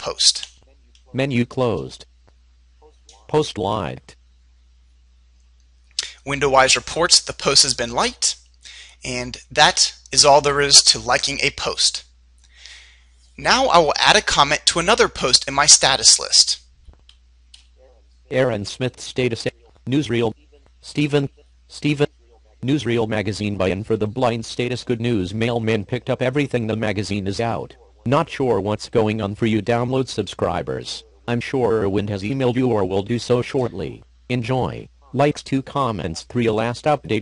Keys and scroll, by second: 15.7 Up.